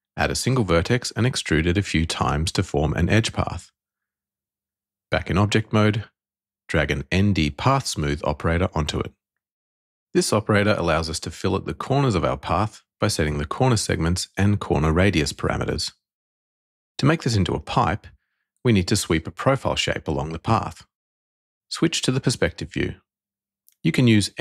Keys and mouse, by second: 0.8 e, 2.5 ctrl+click, 3.0 e, 4.6 ctrl+click, 5.1 Tab, 6.3 click, 10.8 click, 10.9 click, 11.9-13.0 drag, 14.3-15.7 drag, 17.7 click, 21.2 middle click, 22.8-23.4 shift+middle drag.